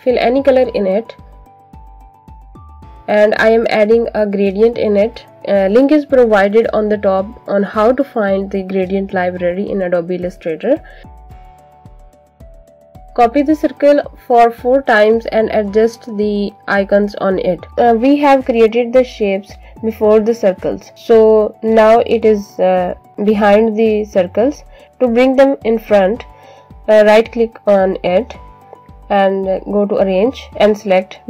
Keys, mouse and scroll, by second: 0.5 alt+click, 4.2 click, 9.0 click, 9.5 click, 11.8 click, 13.0 click, 13.5 click, 14.1 alt+click, 14.5 alt+click, 15.2 click, 16.3 click, 17.1 click, 21.5 click, 28.4 right click, 30.3 click.